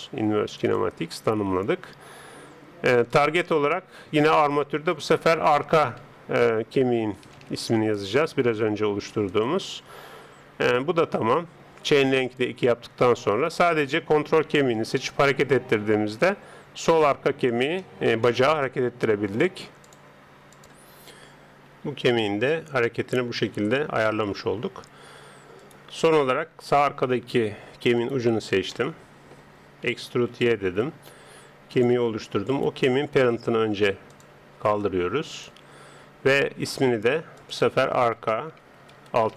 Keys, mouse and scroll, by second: 3.1-6.8 drag, 7.2 BackSpace, 12.0 click, 13.3 right click, 14.0-21.6 middle drag, 14.9 g, 21.8 g, 24.0 middle click, 25.6 right click, 26.5 Tab, 29.8 e, 32.5 right click, 34.1-37.1 drag.